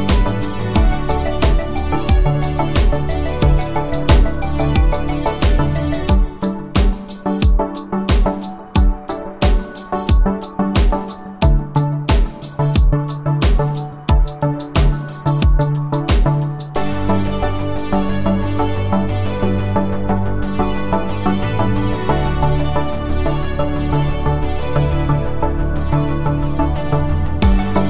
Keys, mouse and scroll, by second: 2.6 u, 3.7 u, 7.5-9.1 click, 11.6 ctrl+click, 14.3-15.9 click, 17.5 ctrl+click, 22.7-23.3 click.